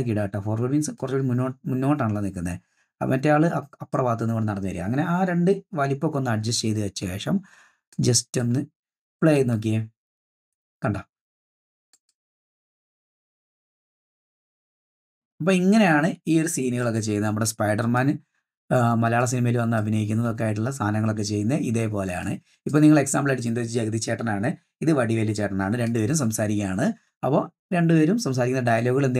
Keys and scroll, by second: 9.4 space, 16.7 space, 20.1 space, 26.1 space.